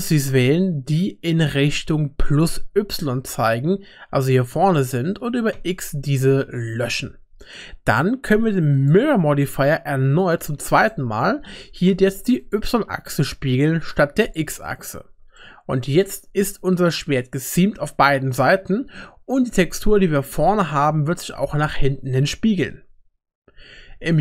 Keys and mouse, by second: 0.1-4.8 drag, 5.6 x, 6.8 typing, 8.8-10.9 drag, 12.4 click, 14.2 click, 15.4 middle click, 16.2 Tab.